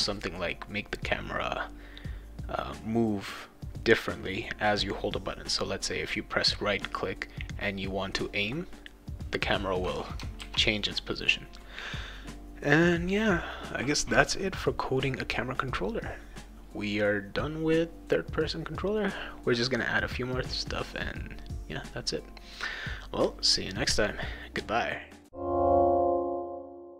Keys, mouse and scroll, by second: 10.4 ctrl+s.